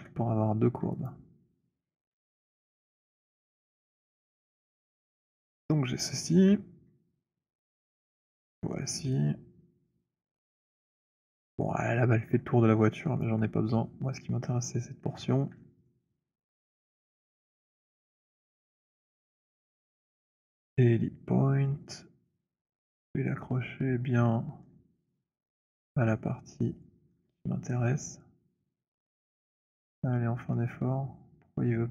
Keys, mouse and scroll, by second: 1.1 click, 2.1 Delete, 3.3-4.3 scroll, 6.0 click, 7.8 click, 9.0 alt+click, 9.8 alt+middle click, 10.6 alt+middle click, 11.5 alt+click, 12.9 alt+click, 13.3 alt+click, 15.8 alt+click, 16.4 alt+right click, 17.5 alt+middle click, 17.7 alt+right click, 19.2 right click, 20.2 click, 22.2-27.1 typing, 24.8 middle click, 27.1 middle click, 29.3 c, 30.0 c, 30.2 middle click, 30.2-31.9 c.